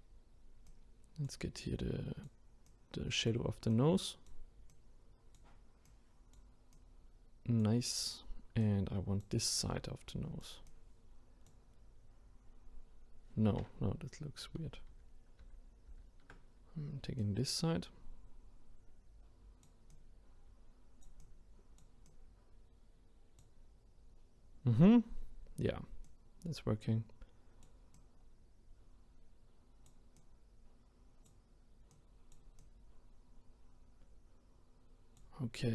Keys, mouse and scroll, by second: 14.9 ctrl+z, 15.4 ctrl+z, 17.2-25.2 drag, 26.0-35.7 drag.